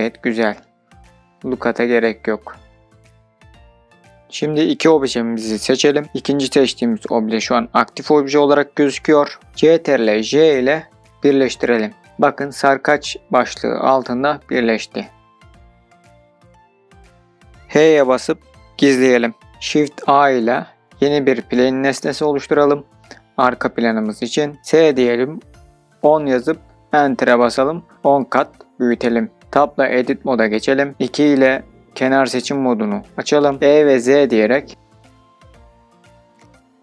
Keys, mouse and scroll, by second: 0.1-3.1 middle drag, 3.1 scroll down 1, 4.7 shift+click, 9.8 ctrl+j, 11.7 drag, 12.4 click, 13.4 click, 15.8-16.5 drag, 16.5-17.1 scroll down 2, 17.1-17.5 middle drag, 18.3 h, 19.8 shift+a, 22.7 s, 23.9 KP_1, 24.1 KP_0, 25.8 KP_Enter, 28.0 Tab, 30.9 2, 32.2-34.5 drag, 34.5 e, 36.3 z.